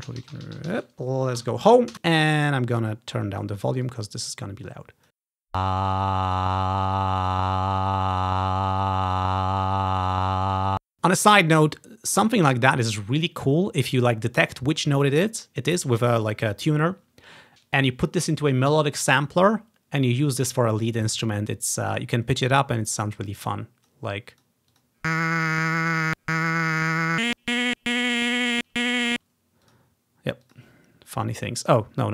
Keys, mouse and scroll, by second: 0.4 ctrl+v, 1.5 Home, 2.0 Home, 2.0 space, 3.0 click, 4.2-6.9 drag, 5.5 typing, 23.3-24.6 drag, 24.9 click, 26.0 click, 26.6 click, 27.1 click, 27.2 right click, 27.3 click, 27.7 right click, 27.7 click, 28.5 right click, 28.6-30.7 drag, 29.1 space, 31.8 click.